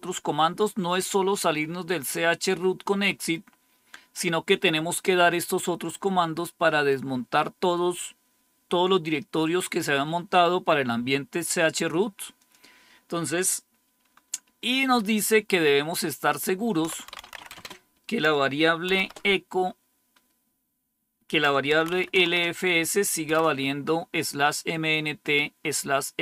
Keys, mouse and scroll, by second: 1.5-3.3 scroll up 1, 3.3-4.4 scroll down 1, 4.4-11.9 scroll down 1, 12.3 click, 16.5-17.7 typing, 18.8 typing, 21.4-23.9 typing.